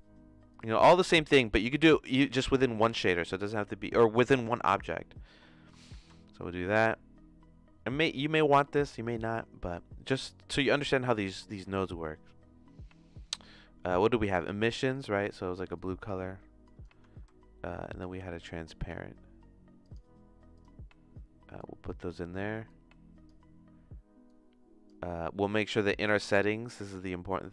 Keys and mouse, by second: 5.8 shift+a, 17.1 q, 18.0 shift+a, 21.5 click, 22.7 click, 24.4 click.